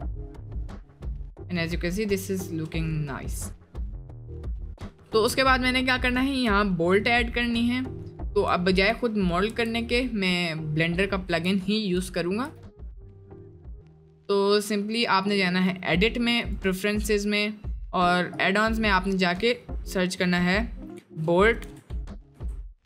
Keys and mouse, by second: 0.4 click, 0.8-1.4 middle drag, 1.6 middle drag, 3.1-3.6 middle drag, 3.9 middle click, 4.7-5.0 shift+middle drag, 5.1 shift+middle click, 5.4 middle click, 5.8-6.2 middle drag, 8.7 shift+middle drag, 9.3 click, 9.5 Tab, 12.2 shift+middle drag, 12.8-13.1 middle drag, 13.3 middle click, 13.7 middle click, 14.2 middle click, 15.5-16.6 drag.